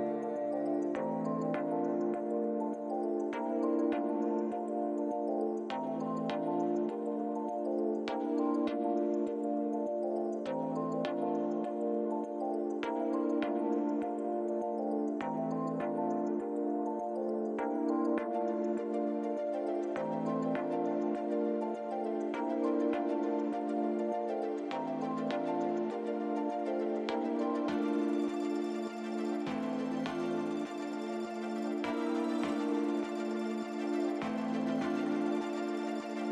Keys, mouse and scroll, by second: 2.2 middle click, 4.7 l, 7.6 click, 8.6 click, 9.1 click, 10.2 click, 10.8 Tab, 11.8 middle click, 13.4 scroll down 2, 14.6 middle click, 15.9 shift+middle click, 16.6-16.9 scroll up 2, 18.1 click, 19.9 click, 22.8 click, 23.7 click, 26.1 click, 27.4 click, 28.1 click, 33.7 click, 35.2 click.